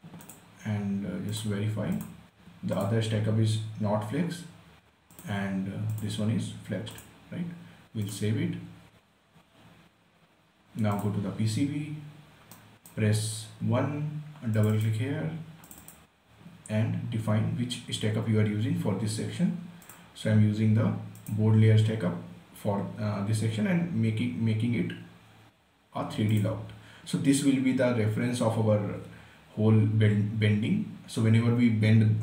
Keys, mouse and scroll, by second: 0.5 click, 11.3 click, 12.8 right click, 13.9 1, 14.8 click, 20.2 click, 26.6 click.